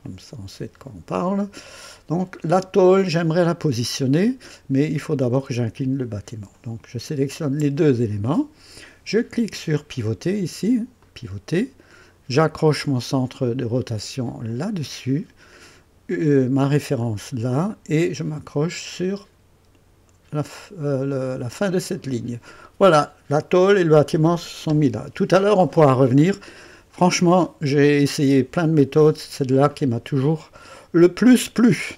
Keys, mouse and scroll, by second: 0.0-0.8 typing, 7.1 ctrl+click, 11.0 click, 14.5 click, 17.0 click, 21.8 click, 27.4-28.5 right drag, 30.2 click.